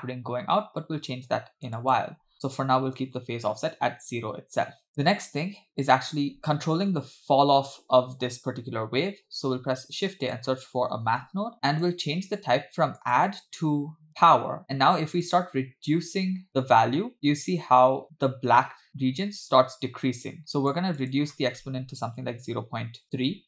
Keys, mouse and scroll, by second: 1.8-3.4 shift+drag, 4.9-5.4 drag, 9.6 shift+a, 13.0-14.4 drag, 15.3-20.8 shift+drag, 21.0-23.2 shift+drag.